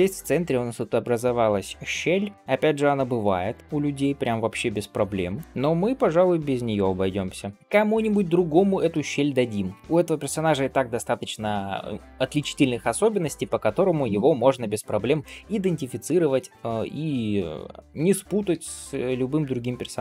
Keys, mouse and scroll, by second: 0.2 scroll up 1, 0.6 click, 1.1 shift+click, 2.3 g, 3.6 click, 4.1 g, 5.4 click, 5.9 g, 6.9-7.4 scroll down 2, 7.2 middle click, 8.2 scroll up 2, 8.9 shift+middle click, 14.6 scroll down 1, 15.1 shift+middle click, 15.6 middle click, 16.1-16.5 scroll up 1, 16.5 click, 16.8 middle click, 17.8 middle click, 18.4 g.